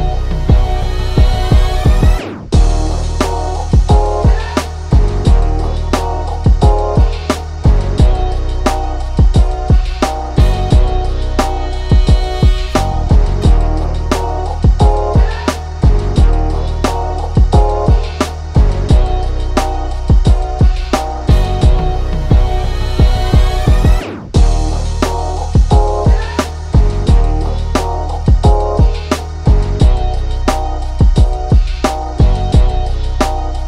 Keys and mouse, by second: 0.6 ctrl+shift+[, 0.8 ctrl+], 1.6 click, 3.6 click, 4.7-7.4 drag, 8.5 ctrl+shift+[, 9.5-12.8 drag, 12.8 Down, 13.0 Left, 13.2 Up, 13.7 Left, 14.0 Right, 14.8-19.6 drag, 19.8 ctrl+shift+[, 21.3-24.4 drag, 25.1 ctrl+z, 25.7 click, 28.3 click, 29.1-32.4 drag.